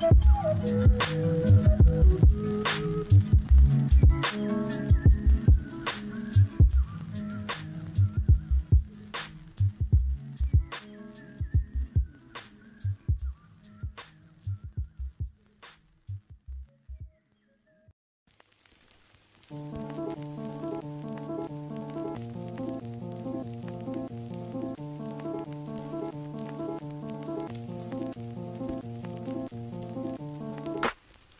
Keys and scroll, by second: 2.5 ctrl+z, 4.6 ctrl+z, 5.4 ctrl+z, 6.0 ctrl+z, 27.0 ].